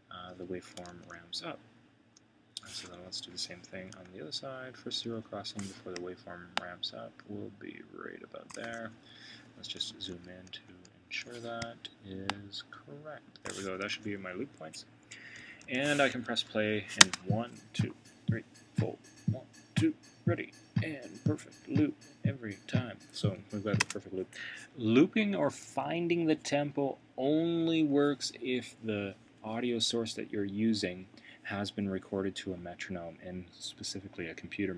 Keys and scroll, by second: 0.9 super+[, 3.0 Left, 4.0 super+], 8.9 Left, 9.9 super+], 13.4 super+], 14.1 super+[.